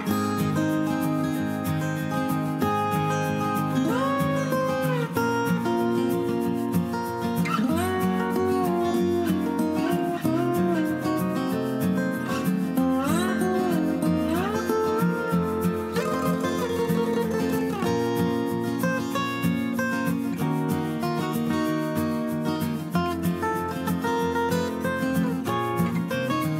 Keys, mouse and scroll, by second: 9.6 F2.